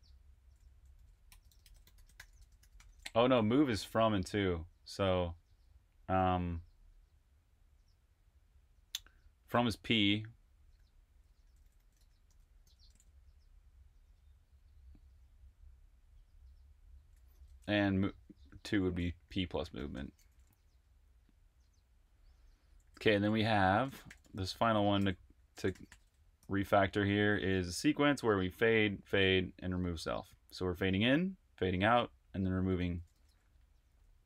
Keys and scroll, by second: 0.0-2.7 typing, 5.1 typing, 9.7-12.2 typing, 14.8 typing, 17.3 p, 18.4-26.3 typing, 32.5-34.0 typing.